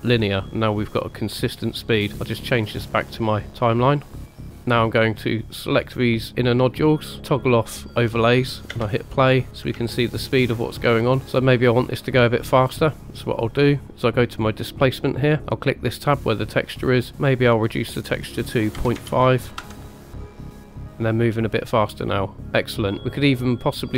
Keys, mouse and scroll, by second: 2.7 click, 3.4 click, 4.3 click, 4.7 scroll up 1, 5.7 click, 6.3-6.7 middle drag, 7.9 click, 8.7 space, 9.2-9.5 middle drag, 9.8-10.5 shift+middle drag, 15.7 click, 17.7 click, 18.4 click, 18.7 click, 23.0 click.